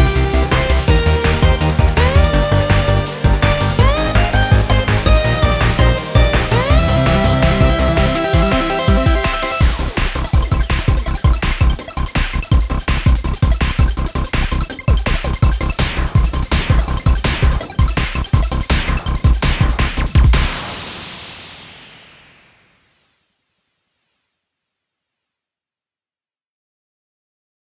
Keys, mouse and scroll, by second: 0.0 scroll up 1, 0.2-3.3 middle drag, 5.2-7.3 drag, 7.3 scroll up 2, 7.7-10.5 middle drag, 10.5 scroll down 4, 11.1 scroll up 2, 11.3 middle click, 12.1-13.2 drag, 13.2 scroll up 2, 13.5 middle click, 14.5 scroll down 1, 14.6-16.9 middle drag, 16.9 click, 17.6-18.6 scroll down 3, 18.6-21.1 drag, 21.1 scroll down 2, 21.4-22.2 scroll up 1, 22.2 KP_0, 23.0-23.5 scroll down 2, 23.5 ctrl+s, 24.3 click, 25.2-26.0 scroll up 2, 26.0-27.2 shift+middle drag, 27.2 click.